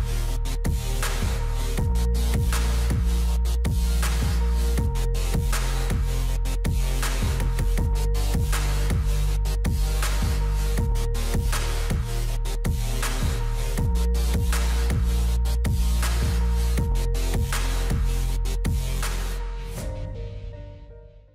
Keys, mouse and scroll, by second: 0.6-3.7 drag, 7.6-9.0 middle drag, 9.0 w, 9.4-9.8 scroll down 1, 9.8-11.2 middle drag, 11.2 Tab, 11.7-12.6 middle drag, 12.6-13.1 scroll up 1, 13.1-16.7 shift+middle drag, 16.7-19.7 drag.